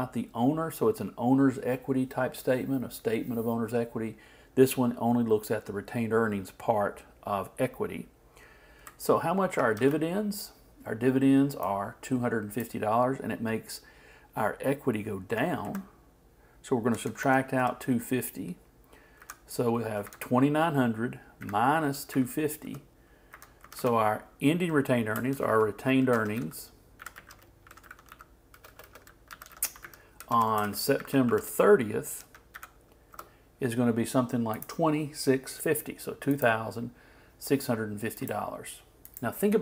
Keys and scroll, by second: 9.8 alt+Left, 15.6 alt+Right, 25.3 shift+r, 30.6 shift+space, 30.6 shift+s, 31.0 shift+e.